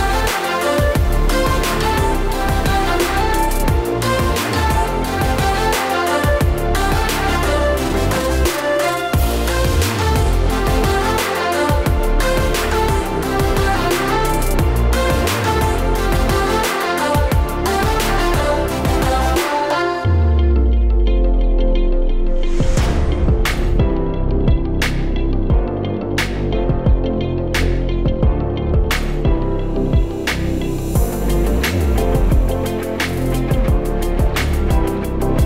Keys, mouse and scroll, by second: 0.3 click, 2.4 click, 2.8 click, 4.6 click, 5.3 click, 5.7 Tab, 5.7 a, 6.0 middle click, 7.0-8.0 scroll down 5, 7.4-8.0 scroll up 2, 8.0 scroll up 1, 8.1 shift+a, 9.8 r, 11.2 Tab, 11.7 BackSpace, 12.2 BackSpace, 12.8 KP_8, 13.8 Tab, 15.0 s, 15.9 middle click, 16.9 click, 17.4 click, 18.2 click, 19.8 click, 20.2 click, 23.6 click, 24.6 ctrl+z, 24.6 click, 25.2 click, 26.4 click, 27.3 click, 27.7 middle click, 28.8 click, 29.5 click, 30.1 click, 31.0 click, 31.9 click, 32.4 middle click, 33.3 s, 34.2 click, 35.2 click.